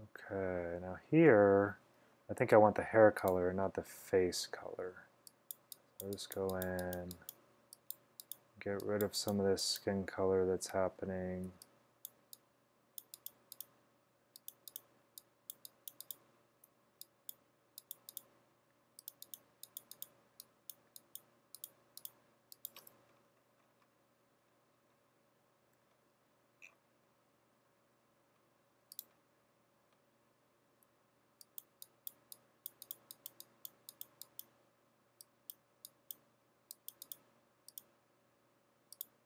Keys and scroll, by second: 11.6 x, 16.8 x, 31.0 x.